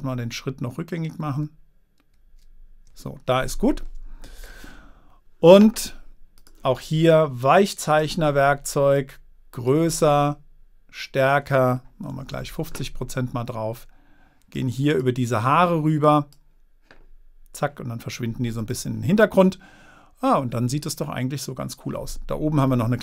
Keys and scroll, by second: 12.5 5, 12.7 Return.